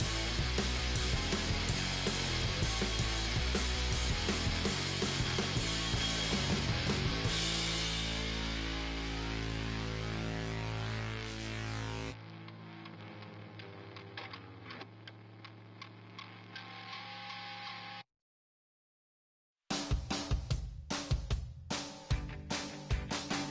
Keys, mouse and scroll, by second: 0.8-2.5 drag, 2.5-5.4 middle drag, 2.5-8.4 right drag, 5.2 g, 6.9 g, 7.7-14.5 middle drag, 8.2 g, 11.3-15.0 right drag, 13.5 g, 15.0 g, 15.7-17.4 right drag, 16.1 g, 17.5 right click, 17.6 g, 18.4 right click, 19.0-21.0 middle drag, 19.4 g, 22.1 middle click, 22.4-23.5 right drag.